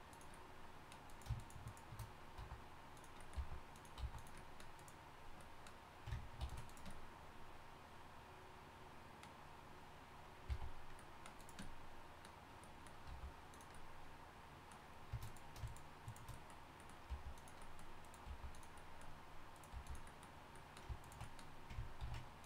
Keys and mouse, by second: 2.2 right click, 2.4 s, 3.4 g, 4.0 s, 6.4 ctrl+r, 10.5 c, 11.8 click, 13.1 g, 15.2-16.2 drag, 16.4-17.9 drag, 17.1 g, 18.0 click, 18.3 g, 19.7 g, 20.2-21.3 drag, 22.0 ctrl+f.